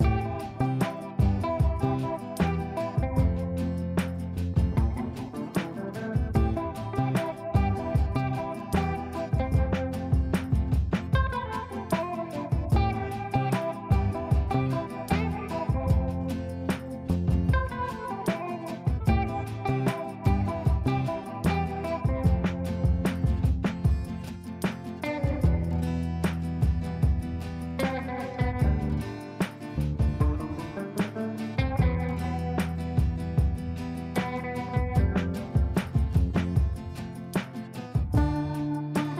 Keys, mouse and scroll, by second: 0.2 F3, 1.4 shift+click, 2.6 click, 5.2 shift+click, 6.4 r, 6.8 click, 6.8 click, 7.0 F2, 7.5-7.8 click, 10.4 shift+click, 11.2 b, 12.4-13.0 drag, 14.7-15.6 ctrl+drag, 17.1 F3, 18.1-19.0 drag, 21.3-21.7 ctrl+click, 23.4 F2, 24.1 click, 26.6-28.2 drag, 28.6 space, 30.3 right click, 32.0 click, 35.8 click, 37.1 F2, 37.4-39.1 drag.